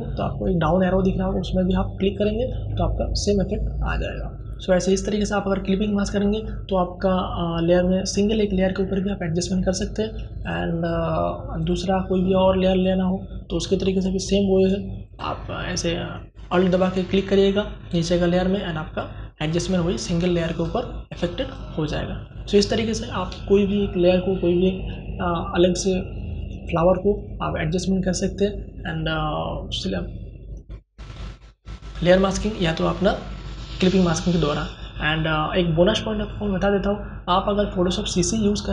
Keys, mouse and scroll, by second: 1.0 alt+click, 9.3 click, 18.8-30.4 drag.